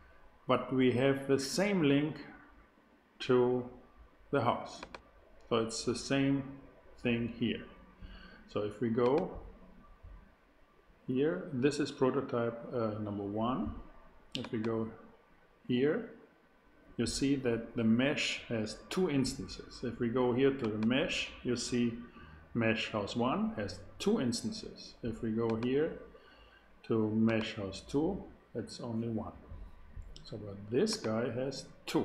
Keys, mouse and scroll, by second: 4.7-7.0 drag, 9.0-11.1 drag, 14.3-18.2 drag, 20.6-23.5 drag, 25.4-29.6 drag, 30.9-32.0 drag.